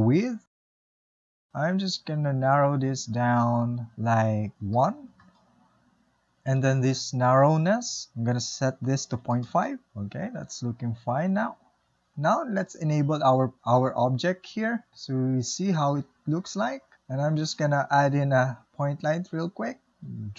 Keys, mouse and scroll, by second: 4.4-7.5 drag, 9.2-11.5 drag, 11.5 space, 14.5 click, 15.3-18.5 middle drag, 18.5 shift+a, 20.0-20.3 middle drag.